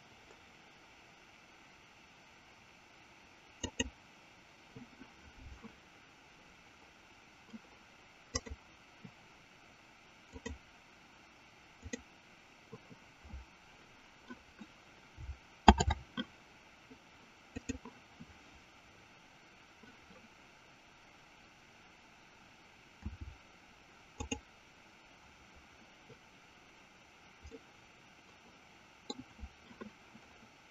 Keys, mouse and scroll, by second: 3.8 click, 10.8 click, 12.3 click, 15.6 shift+a, 23.1 s, 27.7-28.1 scroll up 1, 28.1-29.8 middle drag.